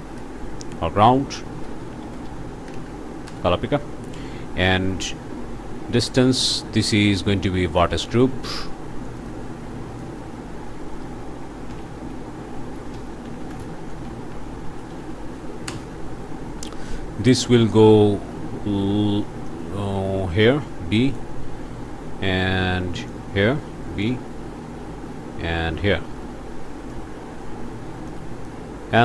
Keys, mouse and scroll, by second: 1.5-2.7 typing, 3.3 Return, 6.6-8.0 drag, 9.2 click, 9.9 click, 11.7-15.1 typing, 15.6 Return, 16.6 click, 17.2 scroll down 1, 17.6 click, 19.5-21.3 drag, 23.1-24.2 drag, 26.9-28.6 drag.